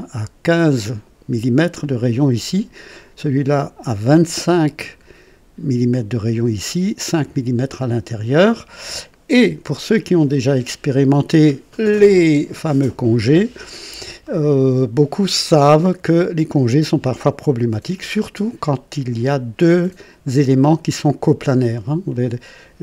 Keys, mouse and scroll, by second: 1.8 click, 3.8-5.2 drag, 8.4 click, 10.3-11.8 drag, 14.2-16.6 drag, 17.9 click, 22.1 click.